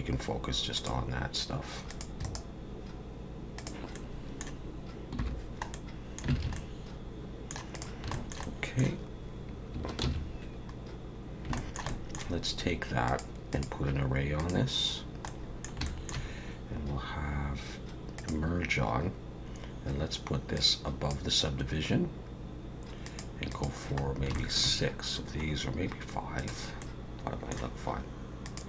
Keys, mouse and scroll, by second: 0.7 click, 1.9 click, 2.2 right click, 3.9 middle click, 5.2 /, 5.7 middle click, 6.4 alt+a, 6.5 middle click, 7.7 click, 8.1 shift+middle click, 8.4 middle click, 10.8 ctrl+s, 11.2 scroll down 3, 11.6 shift+middle click, 11.9 middle click, 13.1 click, 13.5 click, 15.3 middle click, 15.9 shift+middle click, 18.2 click, 20.6 click, 23.0 click, 23.6 click, 24.0 scroll down 2, 24.3 shift+middle click, 26.4 click, 26.8 middle click, 28.5 click.